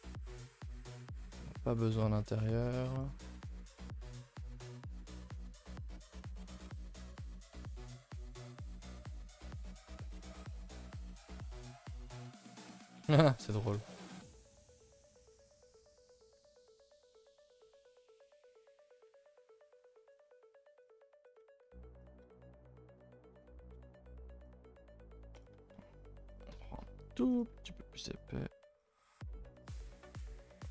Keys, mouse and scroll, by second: 0.0-0.4 shift+middle drag, 0.4 scroll up 4, 0.6 Tab, 0.9 a, 1.1 a, 1.2 click, 1.8 shift+click, 2.4 shift+click, 2.7 shift+click, 3.0 shift+click, 3.4 x, 3.9 scroll down 2, 4.1 shift+middle click, 4.6 scroll up 4, 4.8-5.2 scroll down 1, 5.2 shift+middle click, 5.3-5.9 scroll up 2, 5.9 click, 6.3 shift+click, 6.5 shift+click, 6.8 x, 7.3 scroll down 3, 7.5 Tab, 8.0 click, 8.2 a, 8.4 a, 8.6 ctrl+s, 8.9-9.8 middle drag, 9.8 scroll down 1, 10.0-10.9 middle drag, 10.9 alt+h, 11.3 a, 11.4 a, 11.5-11.8 scroll down 3, 11.9-12.5 middle drag, 12.5 scroll down 1, 12.6-13.0 middle drag, 13.0 a, 13.1 a, 13.8 KP_0, 14.6 scroll down 1, 18.7 scroll, 18.7-19.0 scroll up 2, 19.0 Tab, 19.2 scroll up 2, 19.4 a, 19.6 a, 19.8 2, 20.1 alt+click, 20.5 s, 21.2 alt+click, 21.6 g, 22.2 r, 23.7 s, 25.3 alt+click, 25.7 s, 26.5 shift+middle click, 27.3 alt+click, 27.6 s, 28.7 alt+click, 29.1 s, 30.3 alt+click, 30.6 s.